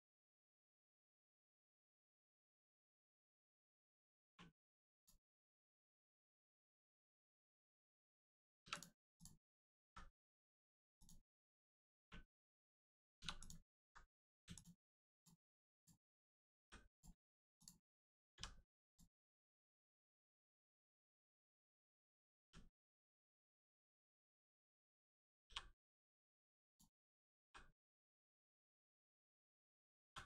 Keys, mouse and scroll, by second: 0.6 middle click, 1.4 shift+middle click, 2.3 middle click, 2.4 click, 3.0 middle click, 4.9 click, 8.6 3, 8.7 click, 9.1 shift+click, 9.8 x, 10.9 click, 11.9 1, 13.3 click, 14.5 alt+click, 15.1 click, 15.7 shift+click, 16.5 click, 16.9 click, 17.5 shift+click, 18.3 click, 18.8 click, 19.5 1, 19.8 click, 20.1 middle click, 20.5-20.9 scroll down 1, 21.0 middle click, 22.4 g, 22.7 middle click, 24.0 right click, 24.3 middle click, 25.4 g, 25.8 middle click, 26.6 ctrl+click, 27.4 g, 27.7 middle click, 29.1 right click, 30.0 g.